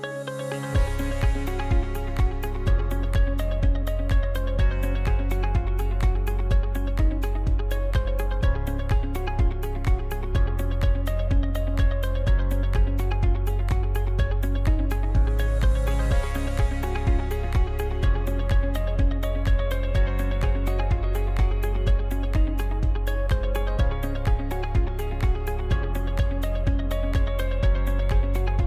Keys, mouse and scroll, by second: 0.9 shift+right click, 1.8 f, 2.4 alt+right click, 3.2 f, 3.4-4.5 middle drag, 4.5 right click, 5.0-6.1 middle drag, 6.1 shift+right click, 7.0 f, 7.6 alt+right click, 8.3 f, 8.6 scroll down 1, 8.9-11.9 middle drag, 12.6-15.1 drag, 15.1 right click, 15.7-17.6 middle drag, 17.6 b, 19.0-20.6 middle drag, 20.6 shift+right click, 21.3-23.3 middle drag, 23.3-23.8 scroll down 2, 23.8 middle click, 24.1 scroll down 1, 24.4-26.0 shift+middle drag, 26.0 shift+g, 28.3 shift+d.